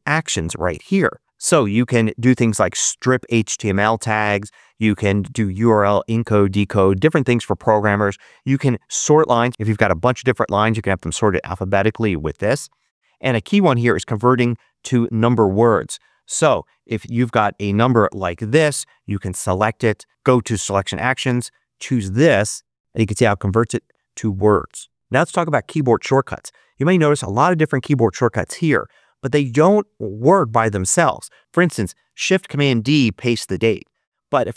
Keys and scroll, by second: 17.0 Return, 17.1-18.6 typing.